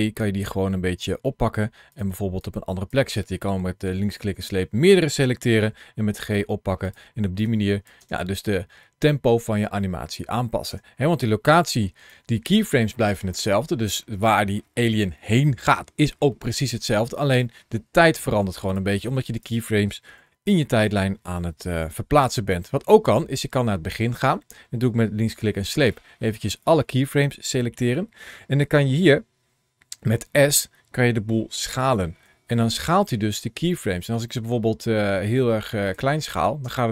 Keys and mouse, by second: 1.8 click, 2.4 click, 5.5 g, 6.7 click, 7.3 click, 7.9 space, 10.5 space, 11.7 ctrl+shift+a, 19.0 click, 20.0 g, 21.7 click, 22.9 click, 25.8 click, 32.1 s, 35.7 click, 36.5 space.